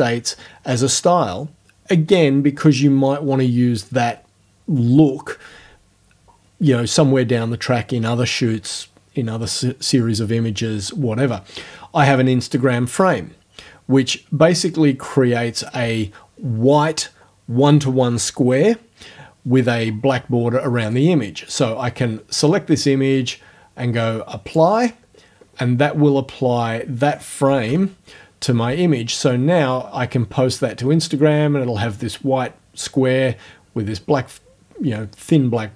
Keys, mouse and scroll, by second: 20.8 click, 24.5 click, 27.7 f.